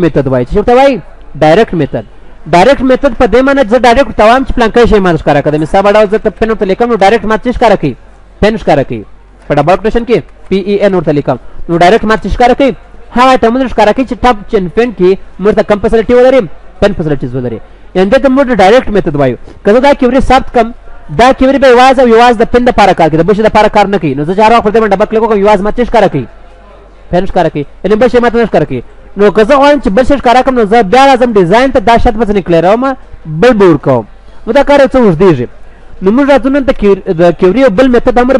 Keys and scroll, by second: 19.2 ctrl+s, 21.0 ctrl+w, 36.1 ctrl+w.